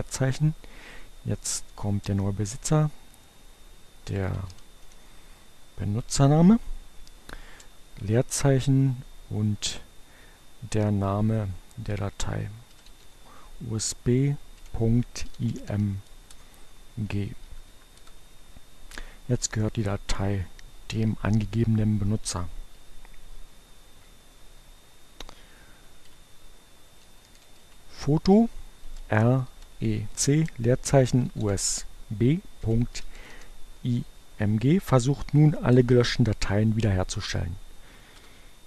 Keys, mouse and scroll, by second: 2.7-3.9 typing, 5.9 space, 10.9 u, 12.6-13.7 typing, 15.1-16.2 typing, 17.1 Up, 17.9 Return, 25.5-28.9 typing, 30.3-33.8 typing, 34.1 Return, 36.3 Return.